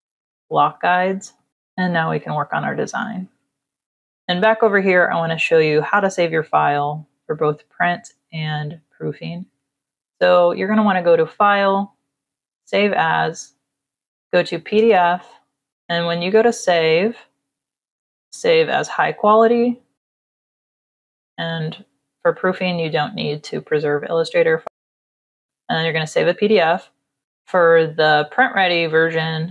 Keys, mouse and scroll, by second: 0.2 click, 1.1 click, 3.3 ctrl+-, 3.8 click, 10.1 click, 12.5 click, 14.0 click, 14.8 click, 15.8 KP_0, 16.7 click, 17.8 click, 19.9 click, 21.4 click, 28.2 click.